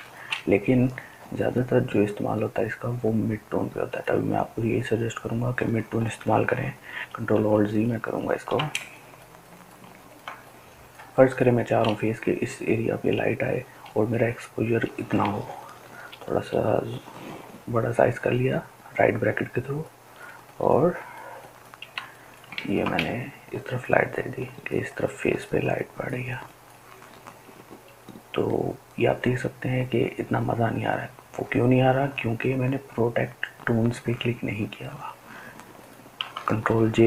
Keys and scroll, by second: 6.5 ctrl+alt+z, 7.0 ctrl+alt+z, 7.3 ctrl+alt+z, 7.6 ctrl+alt+z, 8.9-9.5 ctrl+alt+z, 15.7 ], 16.1 ], 36.7 ctrl+k.